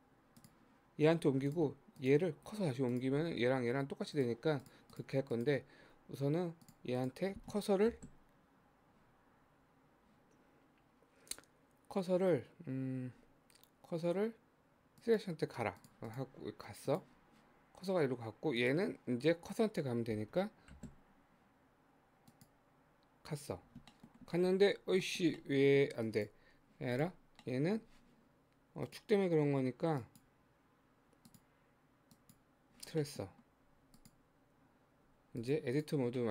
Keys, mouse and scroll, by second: 0.4 click, 2.0 click, 2.9 click, 4.2 click, 4.6 click, 5.3 click, 6.7 click, 7.0 click, 7.8 shift+s, 15.8 click, 16.1 click, 16.9 click, 18.6 click, 20.7 shift+s, 23.9 shift+middle click, 24.1-25.0 shift+scroll up 5, 25.0-26.1 shift+middle drag, 26.1 click, 27.0 click, 27.3 scroll down 1, 27.5-28.8 middle drag, 28.8-33.1 drag, 33.1 middle click, 33.7 Tab, 34.0 click, 35.0 Tab, 35.4 click, 35.8 click, 36.2 middle click.